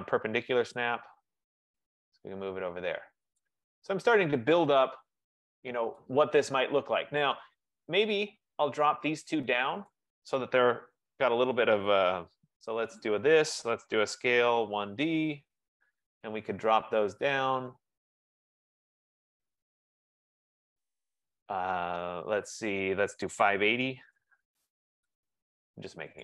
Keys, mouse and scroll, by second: 0.9 click, 3.4 click, 5.6 click, 6.2 click, 7.9 click, 8.9 click, 10.1 click, 13.0 shift+click, 13.7-15.8 typing, 17.8-18.6 typing, 18.6 click, 19.8 click, 23.7-25.5 typing.